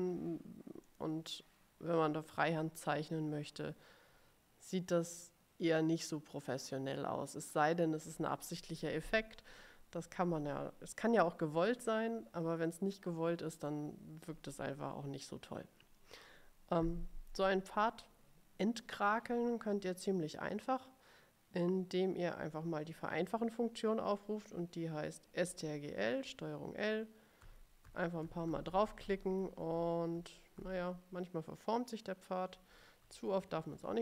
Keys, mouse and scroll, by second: 1.0 click, 27.6 ctrl+l, 28.0 ctrl+l, 28.3 ctrl+l, 29.7 ctrl+l, 30.3 ctrl+l, 30.7 ctrl+l, 32.9 ctrl+z, 33.9 ctrl+z.